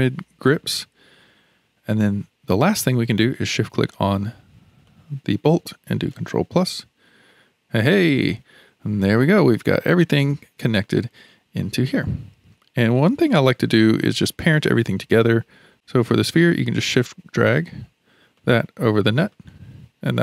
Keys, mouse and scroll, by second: 0.5 shift+click, 1.9-3.8 middle drag, 3.8 shift+click, 4.9-6.5 middle drag, 6.5 ctrl+KP_Add, 7.8 click, 12.9-15.7 middle drag, 15.7 click, 16.8-18.0 drag, 18.3 click.